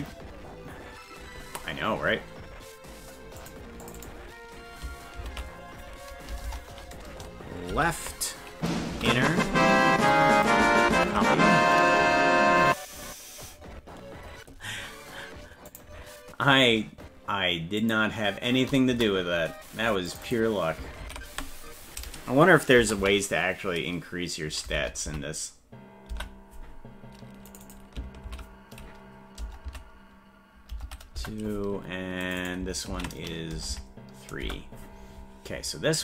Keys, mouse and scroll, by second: 3.4 click, 3.8 click, 4.0-19.5 drag, 6.4 BackSpace, 20.1 click, 20.3 click, 21.5-26.6 drag, 27.5 click, 27.6-31.6 drag, 32.2 click, 32.4-34.9 ctrl+drag.